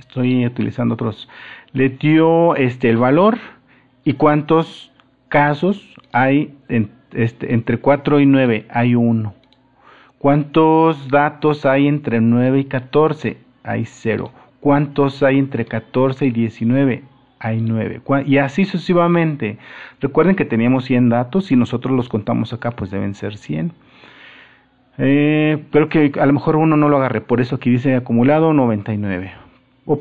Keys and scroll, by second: 29.4 super++.